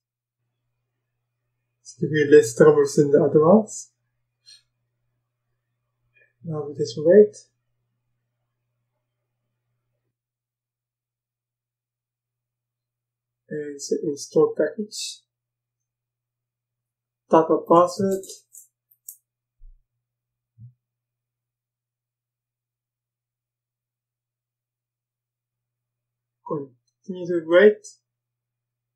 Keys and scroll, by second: 17.3-18.7 typing, 18.9 Return.